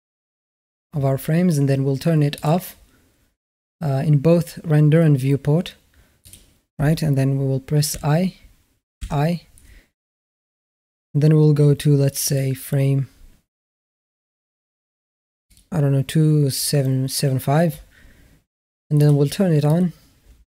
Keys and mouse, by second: 2.2 click, 6.0 click, 7.7 i, 8.8 i, 13.0-14.0 drag, 15.3-16.4 drag, 18.8 click, 19.5 click.